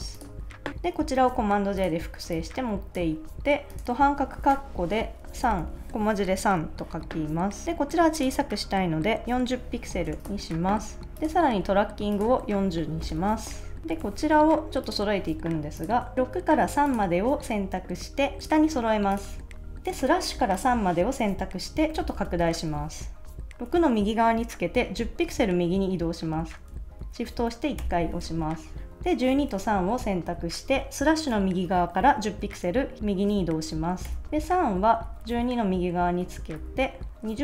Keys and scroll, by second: 1.2 super+j, 3.9-6.1 typing, 9.5-11.4 typing, 10.5 super+s, 12.4-13.4 typing, 13.8 Left, 14.0 super+s, 19.2 super+s, 27.8 shift+Right, 28.9 Left, 34.0 shift+Right, 34.4 shift+Left, 35.1 Right, 35.3 Left, 36.2 Right, 36.5 Left.